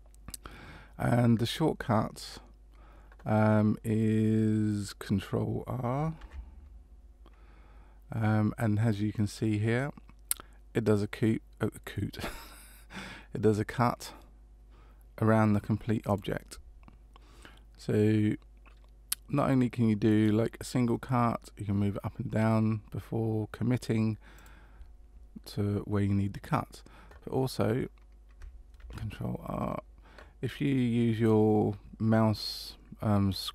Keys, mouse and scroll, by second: 6.2 ctrl+r, 28.8 ctrl+r.